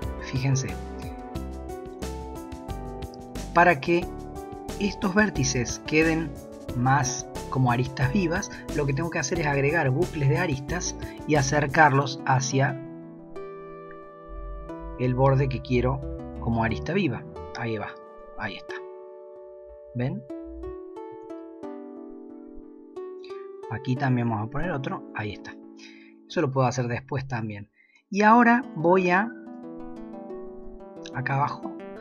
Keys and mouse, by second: 10.0 ctrl+r, 14.9 ctrl+r, 21.1 ctrl+r, 26.4 shift+middle click, 26.6 shift+click, 29.4 shift+click, 31.1 middle click.